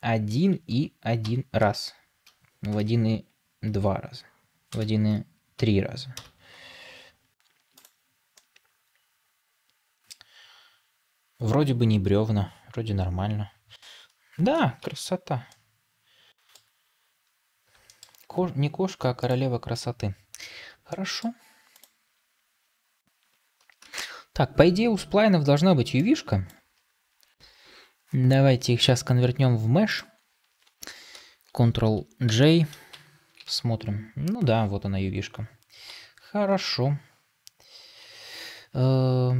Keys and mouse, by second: 6.4 Tab, 8.3-10.0 middle drag, 14.7 ctrl+s, 15.4-16.4 middle drag, 17.8 shift+middle click, 20.8 middle drag, 23.9 ctrl+space, 26.4-26.7 drag, 32.2 ctrl+j, 32.8 Tab, 33.3 a.